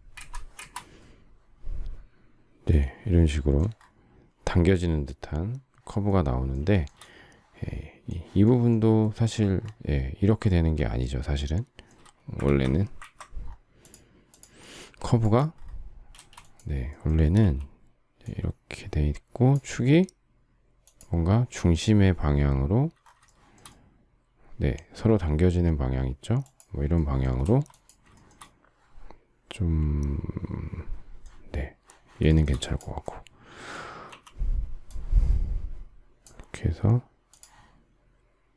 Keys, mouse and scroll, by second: 0.1 Return, 6.7 shift+middle click, 12.4 ctrl+z, 16.1 space, 17.3 q, 23.2 shift+middle click, 27.4 space, 28.1 shift+middle click, 28.2 shift+double middle click, 32.2 shift+middle click, 34.0 q.